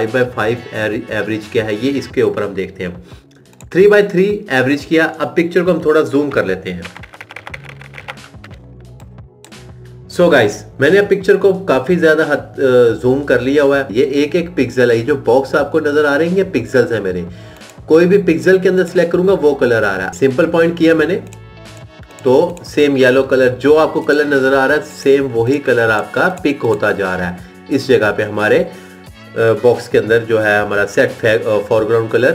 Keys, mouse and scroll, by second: 6.5 ctrl++, 17.3 click, 22.7 click, 24.6 click, 26.6 click.